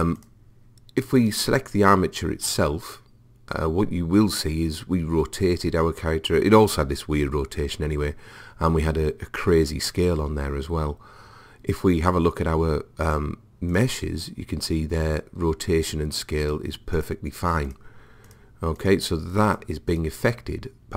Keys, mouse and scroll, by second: 0.2-2.8 drag, 13.7 click, 16.5-20.9 drag.